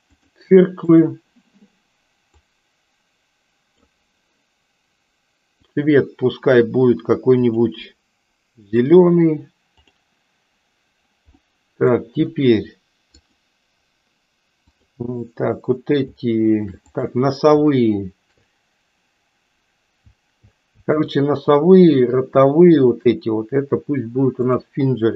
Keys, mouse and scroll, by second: 0.8 click, 2.4-3.7 drag, 5.6 click, 7.4-8.9 drag, 9.8 click, 11.3 middle click, 13.2 click, 16.8 click, 22.7 shift+click, 24.4-25.1 drag.